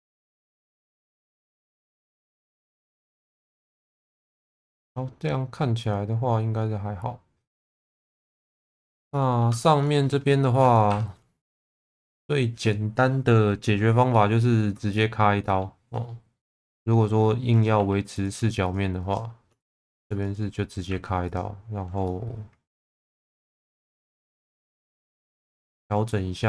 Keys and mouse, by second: 1.5 shift+middle click, 2.6 shift+middle click, 3.0-8.4 middle drag, 8.6 shift+middle click, 9.1 middle click, 9.6 shift+middle click, 10.9 2, 11.6 shift+click, 14.2 shift+middle click, 14.9 shift+middle click, 15.4 shift+middle click, 16.4 shift+v, 17.5 click, 17.8 2, 18.1 click, 18.6 shift+click, 19.0 shift+click, 20.9 1, 21.3 click, 22.1 middle click, 23.4 middle click, 24.5 click, 24.9 middle click, 25.4 shift+middle click.